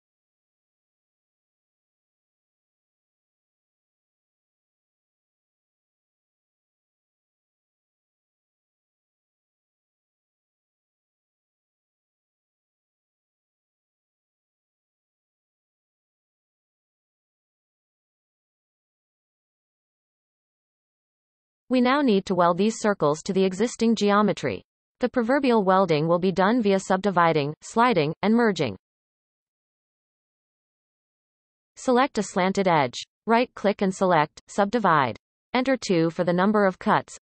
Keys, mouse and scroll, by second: 0.1 alt+a, 0.5 alt+shift+click, 0.8 shift+s, 1.8 shift+a, 2.4 g, 4.8 scroll up 2, 5.0 r, 6.0-6.4 scroll up 2, 6.1 shift+middle click, 6.4 shift+middle click, 6.6 r, 7.9 shift+middle click, 8.0-8.7 scroll up 7, 8.3 shift+middle click, 8.7 r, 9.4 shift+middle click, 9.6 scroll up 4, 9.9 shift+middle click, 10.3 r, 11.7-12.4 scroll down 22, 12.4 shift+middle click, 12.7 shift+d, 13.4 shift+middle click, 13.8-14.5 scroll up 8, 14.1 shift+middle click, 14.5 shift+middle click, 14.8 r, 16.1-17.3 scroll up 5, 16.2 shift+middle click, 16.7 shift+middle click, 17.3 r, 18.5-19.4 scroll down 35, 19.4-19.9 scroll up 3, 19.9-26.3 shift+middle drag, 29.8-32.2 shift+middle drag, 32.2 click, 33.2 shift+click, 34.9 w, 35.7 w.